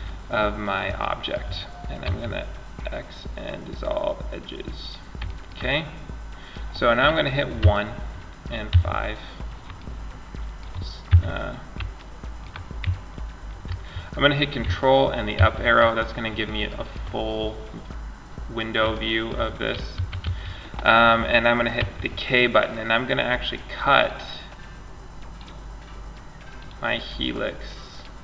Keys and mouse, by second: 1.2 x, 4.3 middle click, 6.8 KP_1, 8.2 KP_5, 8.9 middle click, 10.3 KP_5, 14.6 ctrl+Up, 19.2 a, 19.4 a, 20.9 k, 26.2-28.2 drag.